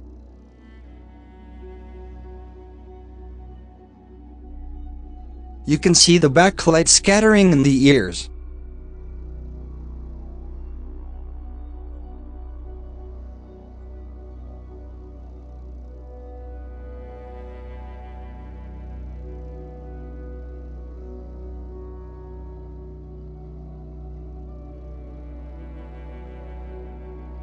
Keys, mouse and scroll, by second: 0.7 shift+middle click, 2.7-3.1 scroll down 13, 3.3-5.0 shift+middle drag, 5.0-5.7 scroll up 7, 5.4 shift+middle drag, 7.6-9.9 drag, 9.9-10.2 middle drag, 10.2 KP_7, 10.3 KP_7, 10.5 scroll up 7, 10.9 shift+a, 14.7-15.1 shift+middle drag, 15.1 g, 16.5 click, 17.0 KP_0, 18.2 scroll up 6, 18.8 g, 19.6 g, 20.2 scroll down 6, 20.5-20.9 shift+middle drag, 20.9 click, 21.2-21.6 scroll down 7, 21.6 h, 22.6 click, 22.9 h, 23.6 scroll down 8, 25.4-26.4 drag, 27.1 scroll up 5.